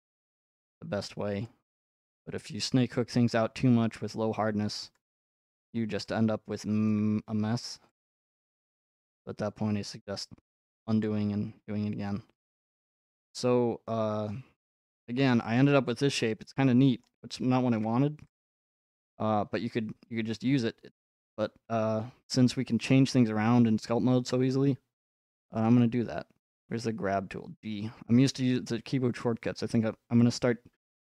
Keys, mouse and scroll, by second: 2.6-5.1 middle drag, 5.1-6.9 drag, 6.9-9.0 shift+middle drag, 11.0-13.1 drag, 17.0-18.4 middle drag, 18.4-20.5 drag, 26.6 g.